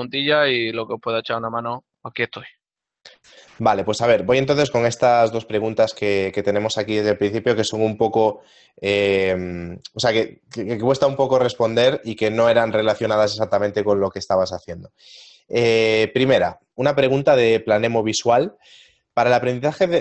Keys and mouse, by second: 0.8 click.